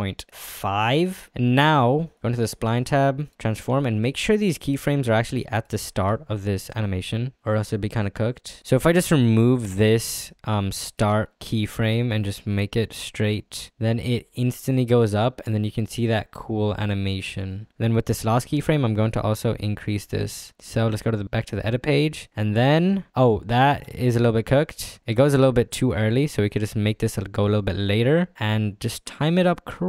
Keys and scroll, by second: 3.9 ctrl+f, 8.8 ctrl+z, 11.3 ctrl+z.